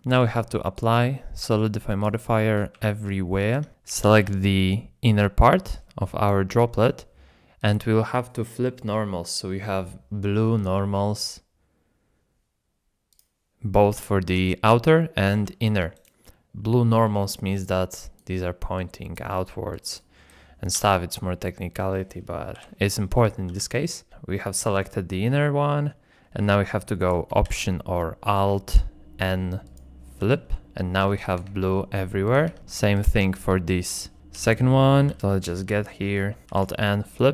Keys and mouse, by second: 0.7 ctrl+click, 3.5 ctrl+Tab, 3.7 KP_7, 4.1 l, 5.1 l, 6.0 click, 7.6-9.2 drag, 10.7 click, 13.8 middle click, 15.3 g, 16.4 d, 17.5-20.2 d, 17.6 click, 18.7 click, 19.7 click, 20.2 click, 20.7 d, 21.3 click, 22.5 KP_7, 23.5 g, 27.0 click, 27.4 alt+n, 30.2 g, 31.3 Tab, 31.7 shift+click, 32.5 Tab, 34.4 l, 35.1 g, 36.5 alt+n.